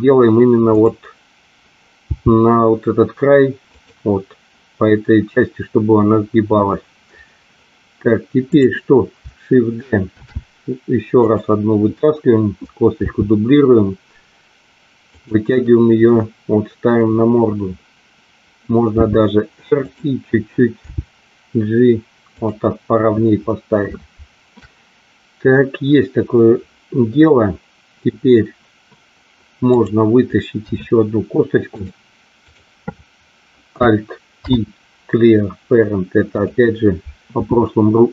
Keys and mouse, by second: 0.6 click, 1.9 g, 3.6 click, 8.5 click, 10.1 shift+d, 13.0 r, 15.1 click, 18.9 r, 19.8 click, 20.8 g, 29.7 click, 30.7 e, 31.8 click, 34.4 alt+p.